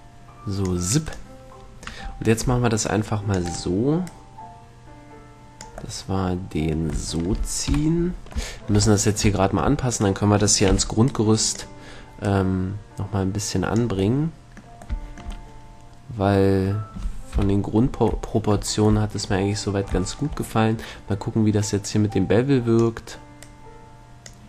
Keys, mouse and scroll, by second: 0.1-2.1 drag, 1.3-3.0 right drag, 2.7 c, 4.3-6.4 drag, 6.4-7.9 middle drag, 7.9 KP_3, 10.2-12.0 right drag, 11.0 b, 12.5-14.4 drag, 14.4-16.6 middle drag, 17.6 KP_7, 22.1-24.4 drag.